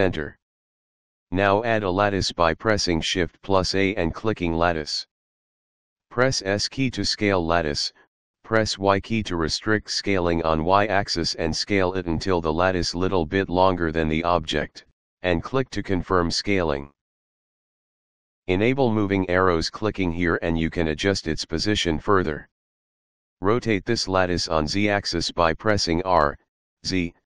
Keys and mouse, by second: 1.3 shift+a, 4.4 click, 9.4 s, 11.8 y, 16.1 click, 18.7 click, 20.7 click, 23.6 r, 25.7-27.2 typing.